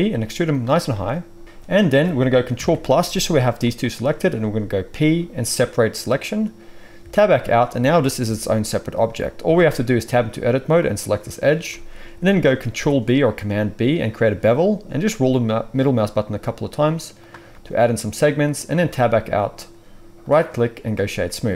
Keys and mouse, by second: 2.5 ctrl+KP_Add, 3.3 g, 4.9 p, 7.0 Tab, 8.2 g, 9.4 Tab, 10.1-20.2 middle drag, 12.7 ctrl+b, 18.7 Tab, 20.2-21.5 drag.